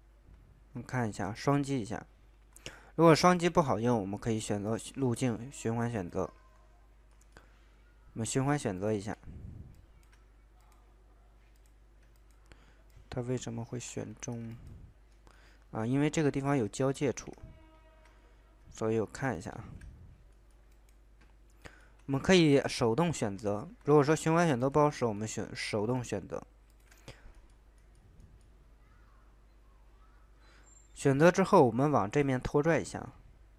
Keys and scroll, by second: 14.1 ctrl+z, 16.4 ctrl+z, 17.1 ctrl+z.